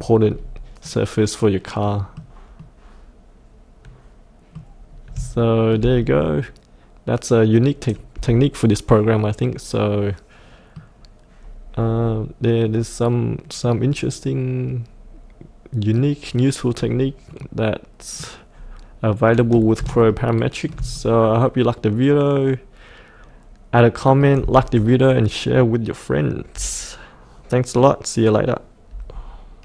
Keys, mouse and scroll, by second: 0.2-0.8 scroll down 1, 0.8-4.6 middle drag, 4.8-5.1 scroll up 1, 5.3 shift+middle click, 6.0-10.7 middle drag, 10.8 middle click, 11.4-11.9 scroll down 1, 12.6-13.8 middle drag, 14.9-16.7 middle drag, 16.7-17.3 scroll down 1, 17.3 middle click, 18.5-19.0 scroll up 1, 19.0 middle click, 20.1 shift+middle click, 20.9-25.0 middle drag.